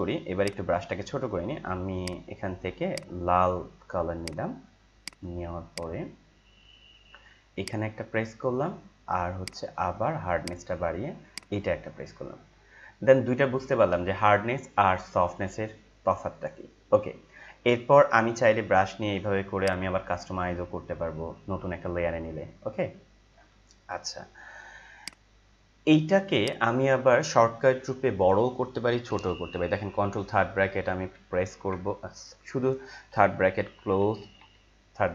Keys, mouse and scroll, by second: 0.4-5.0 drag, 9.4 right click, 10.3 click, 17.9 ctrl+Num_Lock, 17.9 click, 18.4 ctrl+t, 19.5 click, 19.8-25.0 shift+drag, 25.0 right click, 26.4 click, 30.1 ctrl+], 32.6-35.1 typing.